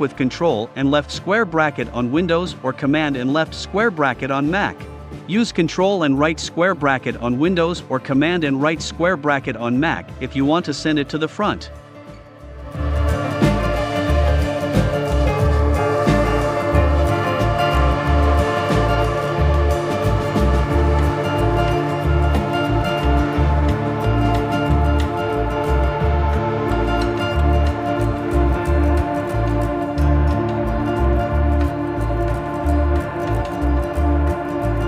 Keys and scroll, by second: 5.8 i, 6.7 v, 15.2 v, 16.3 super+[.